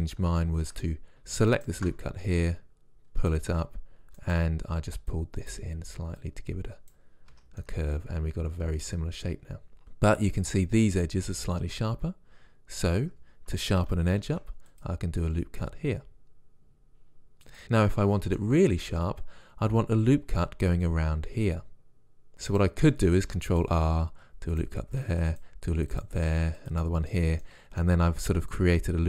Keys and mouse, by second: 1.6 click, 2.4-3.4 middle drag, 3.4 click, 4.3 click, 4.4 right click, 6.1-7.4 right drag, 7.4 Tab, 13.0 Tab, 14.3 ctrl+r, 17.6-21.3 middle drag, 22.3 ctrl+r, 22.6-25.2 drag, 23.3 ctrl+r, 25.2 ctrl+r, 26.3 ctrl+r, 27.5-29.0 drag.